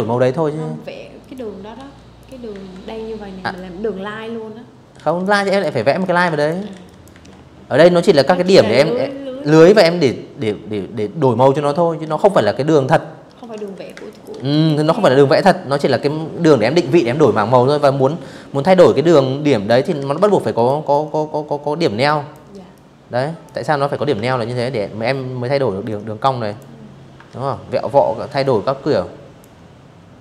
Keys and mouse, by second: 0.2 a, 1.1 click, 2.6-4.8 typing, 2.7 click, 3.1 click, 3.7 click, 4.0 click, 4.5 click, 9.7 z, 11.2 z, 11.3 click, 11.6 space, 11.7 click, 12.0 z, 12.2 click, 12.4 v, 16.7 click, 17.6 ctrl+z, 17.9 a, 18.2 click, 18.6-20.0 drag, 20.4 click, 21.9 ctrl+z, 23.5 click, 24.9 ctrl+z, 26.1-27.1 drag, 27.6-29.4 typing, 28.0 click, 28.3 click, 28.6 click, 29.1 click, 29.5 click.